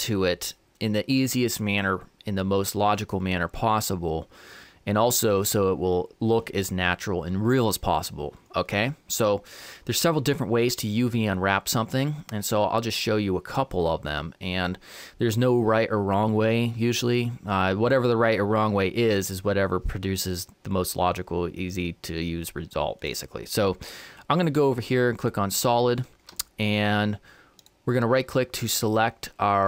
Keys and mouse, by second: 23.0-24.9 drag, 27.6-29.3 right drag.